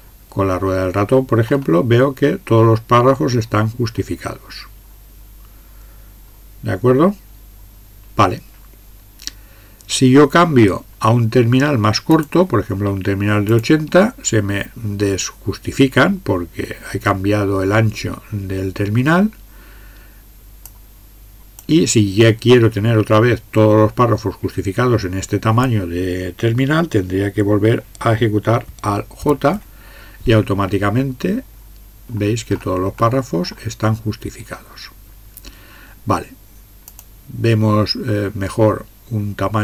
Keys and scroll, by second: 29.2 alt+j.